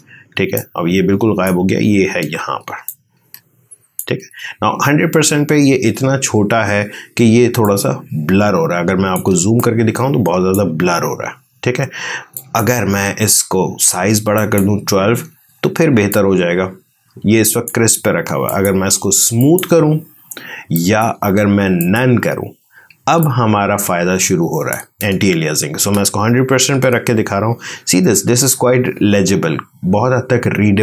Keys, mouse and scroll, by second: 0.2 space, 0.4 click, 0.7 space, 2.7 ctrl+click, 7.1 space, 7.5-12.3 ctrl+drag, 15.8 ctrl+space, 16.0-18.3 ctrl+drag, 22.9 ctrl+space, 23.1-26.3 ctrl+drag, 26.3 ctrl+1.